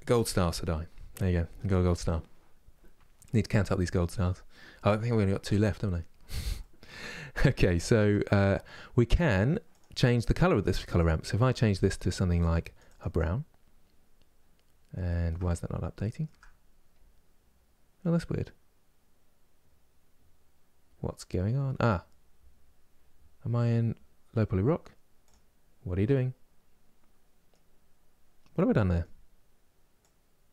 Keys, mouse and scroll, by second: 9.5-11.5 drag, 25.0 click, 25.8-29.8 middle drag, 29.8-30.5 drag.